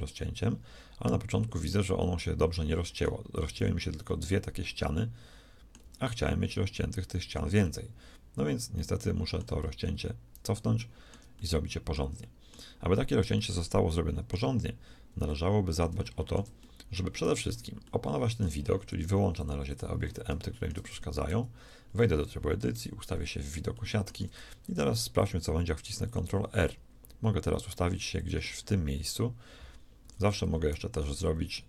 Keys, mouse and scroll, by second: 0.1-1.9 middle drag, 2.1-3.5 middle drag, 3.5 z, 5.8 z, 7.5-9.4 middle drag, 9.9 ctrl+z, 10.9 middle click, 17.3 Tab, 18.8 middle click, 19.3 click, 20.9 shift+Tab, 21.3 z, 22.7 KP_1, 23.1 z, 24.7 ctrl+r, 28.5-30.7 middle drag, 30.0 a, 30.2 a, 30.7 shift+s.